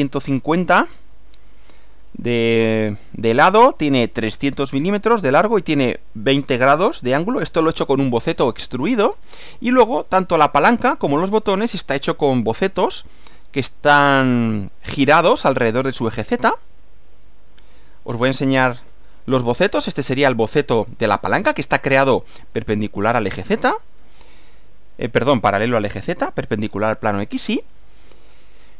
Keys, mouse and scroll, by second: 12.0 click, 17.1 Right, 18.4 click, 18.8 Right.